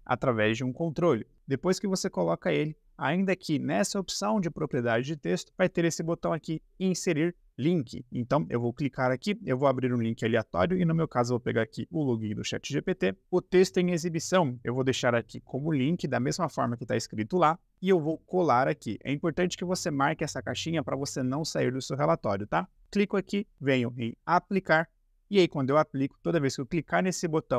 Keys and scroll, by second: 11.1 ctrl+c, 14.3-18.0 typing, 18.0 ctrl+v.